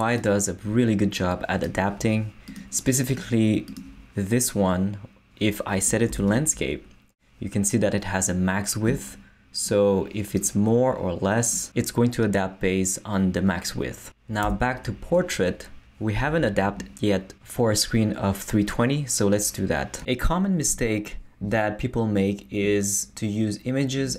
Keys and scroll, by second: 6.1 super+Left, 14.4 super+Left.